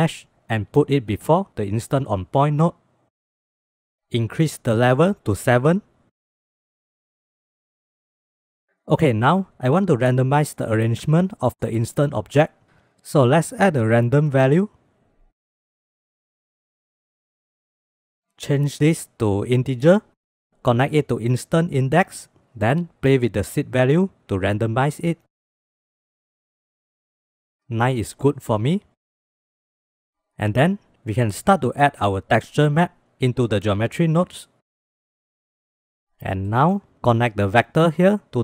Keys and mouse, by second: 4.6-6.1 drag, 6.3 shift+click, 6.7 shift+b, 7.4-7.8 drag, 7.8 shift+drag, 8.4 click, 12.9 middle click, 13.8 shift+a, 17.9 middle click, 19.0-19.9 drag, 21.1-22.2 drag, 23.1 click, 23.3 click, 24.1 middle click, 24.4 middle click, 28.4-29.1 middle drag, 29.3-30.0 middle drag, 30.3-30.7 drag, 31.1 click, 31.5 shift+a, 34.1 middle click, 35.5 middle click, 35.9 click, 36.4 middle click, 37.4-38.4 drag.